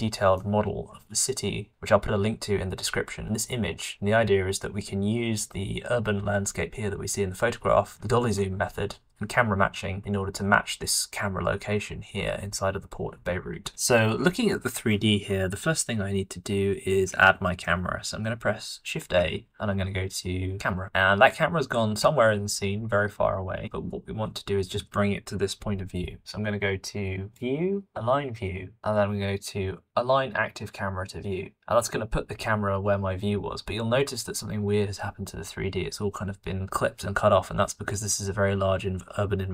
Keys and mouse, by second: 1.6 shift+middle click, 19.4 shift+a, 27.3-30.5 drag, 30.5-34.1 middle drag.